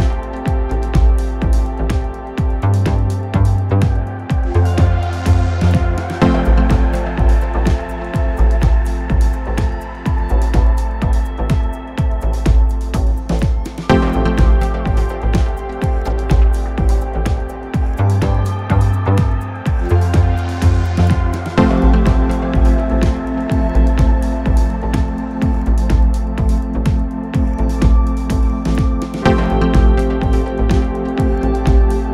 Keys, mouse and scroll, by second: 1.8-3.8 right drag, 3.9 x, 6.5-8.3 right drag, 7.9 g, 11.3-13.1 drag, 16.7 t, 17.5 t, 18.3 n, 19.1 n, 21.2 n, 21.7 n.